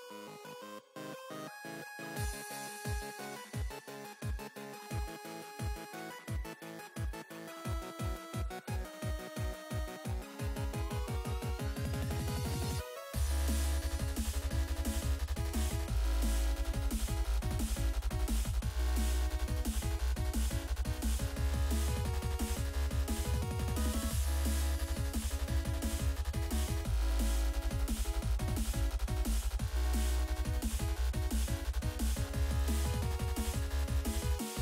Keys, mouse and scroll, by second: 0.8 click, 2.3 click, 2.4 click, 3.3-4.5 typing, 4.6 Down, 4.8 Return, 5.0 Return, 5.9 scroll down 2, 6.6 click, 6.7 click, 8.2 click, 8.3 click, 10.0 click, 11.4 click, 11.6 double click, 13.4 click, 13.6 double click, 14.6 double click, 15.5 F5, 16.6 click, 17.0 F5, 18.4 click, 19.3-31.4 typing, 31.8 click, 32.3 scroll down 2, 32.9 middle click.